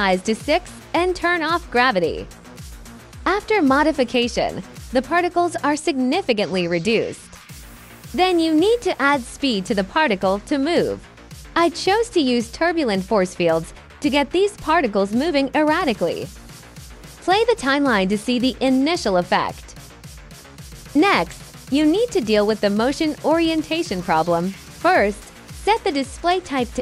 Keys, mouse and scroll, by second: 0.1 click, 0.9 click, 2.2 click, 2.5 KP_0, 4.0 click, 4.8 click, 7.0-8.1 drag, 8.7 alt+click, 9.9-10.7 drag, 12.0 click, 12.5-13.1 drag, 13.7-14.4 drag, 15.5 click, 16.2 click, 17.8-18.1 drag, 19.2-19.5 alt+drag, 19.9 alt+drag, 20.4-20.8 alt+drag, 21.6-22.2 alt+drag, 24.3 click.